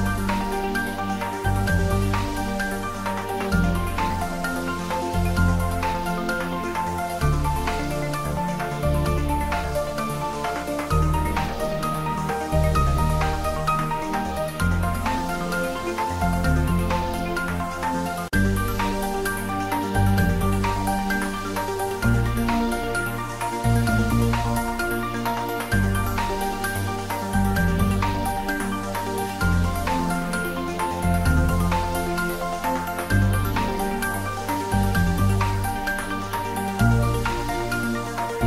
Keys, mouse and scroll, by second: 1.3 ctrl+z, 5.1 click, 5.8 middle click, 6.5-7.3 typing, 7.2 click, 10.2 click, 10.6-12.4 typing, 11.6 click, 13.0 click, 14.4-15.3 typing, 15.9 click, 20.3 ctrl+s, 20.6-23.3 typing, 21.5 click, 23.0 click, 24.4 click, 24.5-25.4 typing, 25.5 click, 26.5 ctrl+s, 28.1 click, 28.3 g, 29.3 click, 29.6-32.1 typing, 30.6 click, 31.3 click, 32.6 click, 32.8 middle click, 33.7 Tab, 34.4 click, 34.8 Tab, 35.1 click, 35.3 middle click, 35.9 3, 36.1 click, 38.1 middle click.